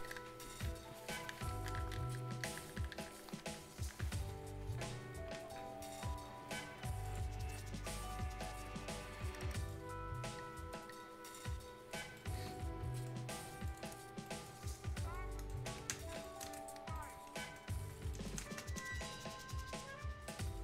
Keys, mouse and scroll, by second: 7.0 ctrl+click, 9.6-11.2 ctrl+drag, 11.9 ctrl+scroll down 1, 12.1 ctrl+right click, 12.5 ctrl+scroll up 1, 12.9 ctrl+right click, 13.6 ctrl+click, 14.2 ctrl+right click, 14.5 ctrl+scroll down 1, 14.8 ctrl+scroll up 1, 15.1 ctrl+right click, 15.9 ctrl+space, 16.0 scroll up 1, 16.2 right click, 16.8 scroll up 1, 16.9 right click, 17.1 scroll down 1, 17.3 right click, 17.8 Caps_Lock, 18.1 right click, 18.4 ctrl+space.